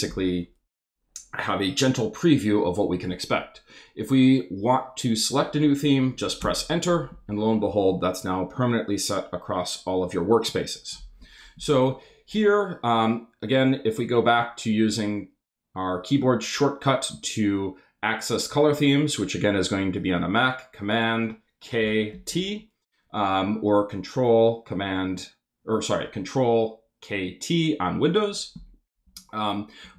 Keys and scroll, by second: 6.4 Return, 21.8 super+k, 22.1 super+t, 29.0 Up.